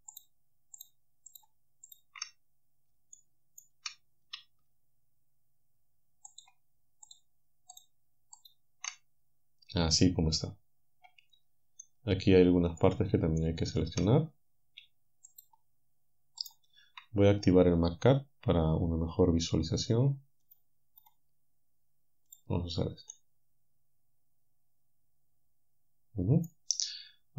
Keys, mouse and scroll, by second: 0.2 alt+shift+right click, 0.8 alt+shift+right click, 1.9 alt+shift+right click, 3.2 shift+right click, 6.3 alt+shift+right click, 7.1 alt+shift+right click, 7.8 alt+shift+right click, 8.4 alt+shift+right click, 11.8-13.0 right drag, 13.4 shift+right click, 15.3 shift+click, 16.4 shift+click, 20.5 click, 21.0-22.3 drag, 23.1-27.3 middle drag.